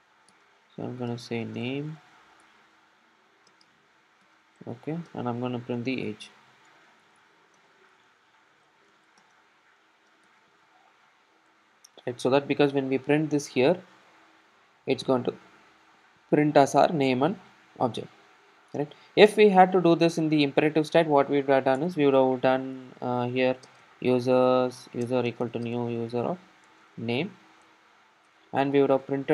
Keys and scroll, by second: 2.5 Return, 11.5 Return, 12.6 super+s, 23.5 Return.